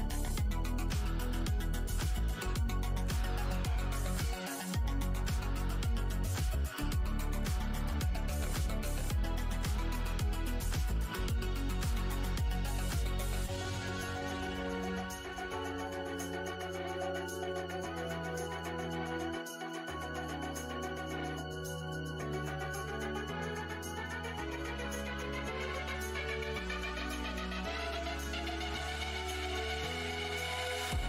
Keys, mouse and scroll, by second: 1.5 ctrl+scroll, 1.5-1.8 ctrl+scroll down 1, 2.2 scroll up 1, 3.0-3.4 alt+scroll up 1, 4.6 click, 4.6 w, 5.0-5.6 alt+scroll down 2, 5.5 w, 6.1-6.5 alt+scroll up 1, 12.3-13.7 scroll up 1, 13.7 click, 14.1 alt+h, 14.8 z, 15.8 alt+h, 16.5 shift+right click, 18.0 space, 18.9 f, 19.1 scroll down 1, 19.4 e, 19.9 click, 20.9 scroll down 1, 21.3-21.9 alt+scroll, 22.1-22.4 scroll, 22.9 right click, 23.9 click, 24.6 shift+d, 26.6 click, 27.3 Tab, 28.4 6, 28.7 Return, 30.0 r, 30.5 ctrl+click.